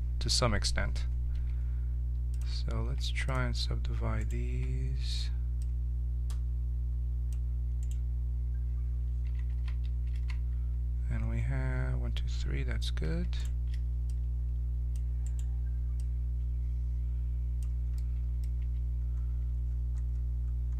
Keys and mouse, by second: 1.3 w, 2.8 w, 6.0-7.8 drag, 7.8-9.5 right drag, 9.5 ctrl+z, 10.1 ctrl+z, 11.2 middle click, 13.4-17.6 right drag, 14.1-17.7 drag, 18.0 middle click, 18.6 Tab.